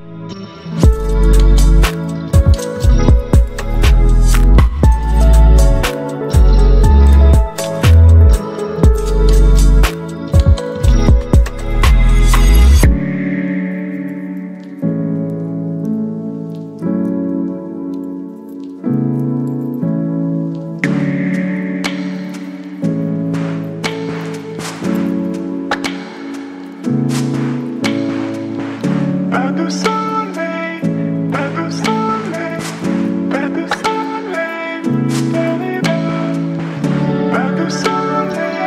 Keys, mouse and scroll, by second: 2.2 click, 2.3-9.0 drag, 10.8 right click, 12.4-16.2 drag, 16.2 ctrl+t, 18.1-27.9 drag, 30.9 click, 33.2 click, 34.6 ctrl+click, 35.8 ctrl+t, 38.0 click.